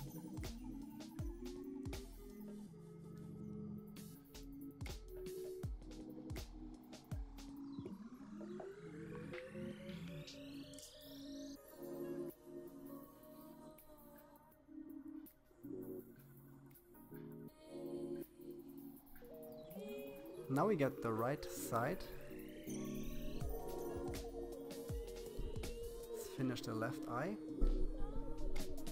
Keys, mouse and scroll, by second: 17.9-18.6 scroll down 6, 18.6-20.2 middle drag, 20.6 KP_7, 21.6-22.8 shift+middle drag, 22.8-23.6 scroll up 5, 23.6-25.3 shift+middle drag, 25.3 c.